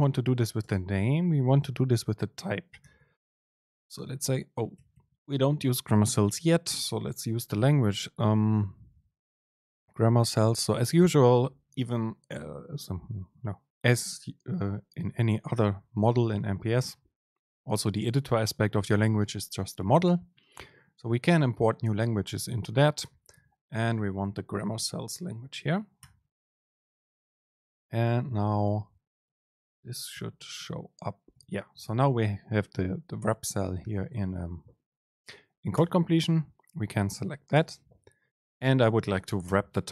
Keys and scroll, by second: 0.1 Return, 0.7 super+space, 6.8 super+l, 28.1 super+space, 37.7 super+space.